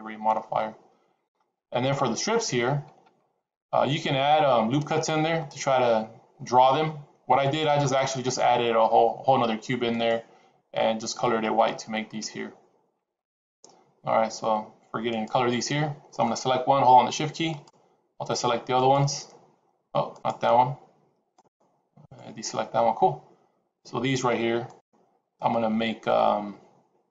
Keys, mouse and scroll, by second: 15.0 click, 17.4 shift+click, 18.6 shift+click, 20.2 shift+click, 21.9 shift+click, 24.8 shift+click.